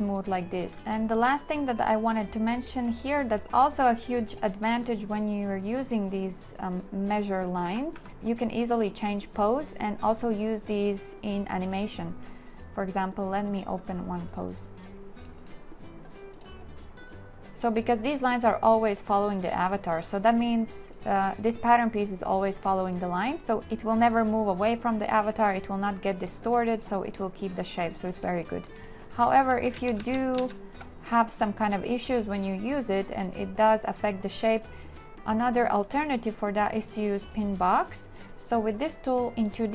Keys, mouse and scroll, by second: 7.7 a, 7.9 click, 8.1 click, 29.5 ctrl+z.